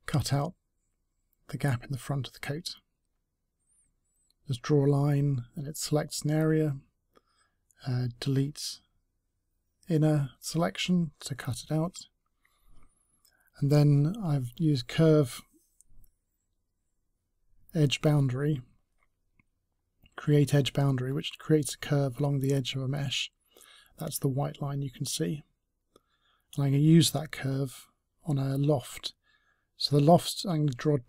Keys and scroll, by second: 21.0 ctrl+c.